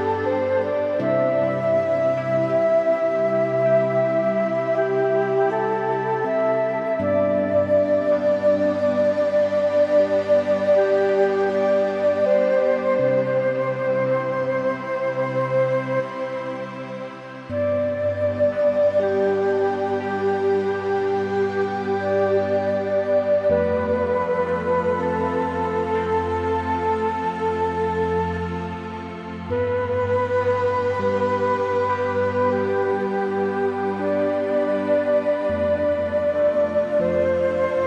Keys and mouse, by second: 0.1 3, 0.9 middle click, 1.5 `, 2.6 e, 5.0 click, 5.5 Tab, 5.6 click, 5.7 middle click, 6.3 Tab, 6.5 middle click, 7.0 ctrl+r, 11.1 middle click, 12.5 ctrl+z, 13.3 ctrl+z, 13.9 ctrl+r, 14.7 click, 14.8 click, 15.1 middle click, 15.7 middle click, 16.1 middle click, 16.5 middle click, 17.9 middle click, 18.5 1, 18.6 middle click, 19.0 click, 19.7 g, 20.2 x, 20.5 z, 21.1 y, 22.6 click, 22.9 Tab, 23.2 middle click, 23.8 Tab, 24.1 click, 24.2 middle click, 25.7 click, 25.9 shift+middle click, 26.1 middle click, 26.5 middle click, 27.6 click, 28.2 3, 28.4 shift+click, 28.8 click, 29.1 click, 29.9 middle click, 30.8 middle click, 31.2 shift+middle click, 31.5 middle click, 31.8 shift+middle click, 32.0 right click, 33.0 middle click, 35.6 shift+middle click, 36.2 1.